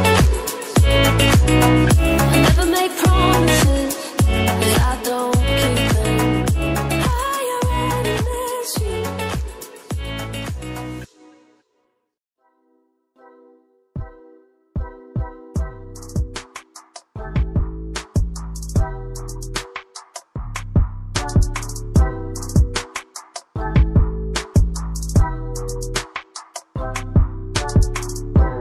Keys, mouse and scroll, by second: 2.6 double click, 3.9 scroll down 1, 18.3 click, 19.0 scroll up 1, 19.5 click, 24.6 click.